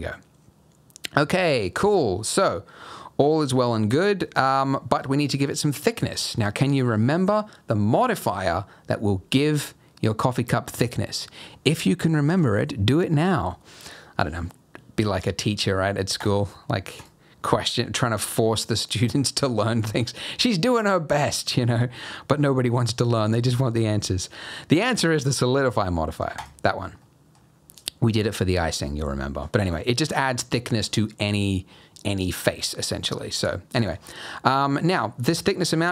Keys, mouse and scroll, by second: 1.3 Tab, 1.5 middle click, 16.2 click, 17.0 click, 27.0 middle click, 27.4 scroll up 1, 29.0-29.3 scroll up 1, 29.3-30.0 scroll down 1, 35.0 click.